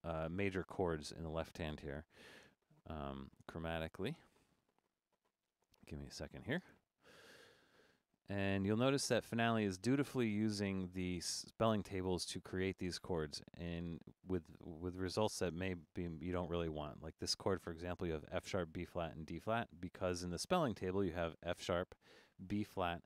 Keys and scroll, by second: 10.0 Escape.